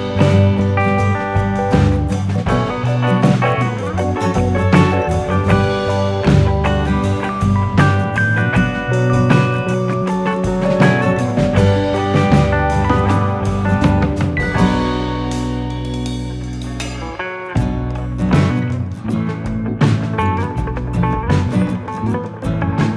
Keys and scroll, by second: 11.2 u, 13.4 u, 16.7 alt+[, 19.5 ctrl+shift+].